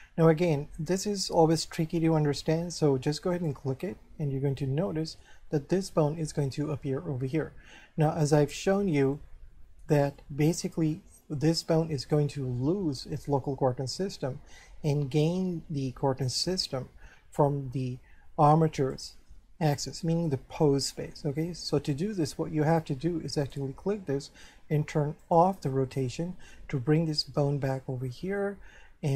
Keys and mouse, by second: 3.3 click, 4.5 shift+middle click, 8.3 shift+middle click, 9.2 middle click, 18.9 right click, 23.4 right click, 25.2 click, 26.0 shift+middle click, 27.9 shift+middle click.